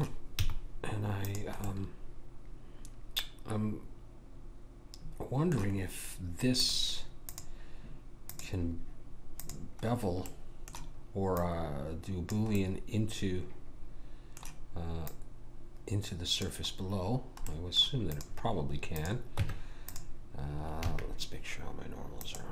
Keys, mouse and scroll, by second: 0.4 z, 6.6-13.2 drag, 10.3 middle click, 11.4 middle click, 12.6-15.1 middle drag, 15.1 click, 17.1-18.1 middle drag, 18.1-20.8 drag, 18.1-19.3 right drag, 19.3 Tab, 20.9 a.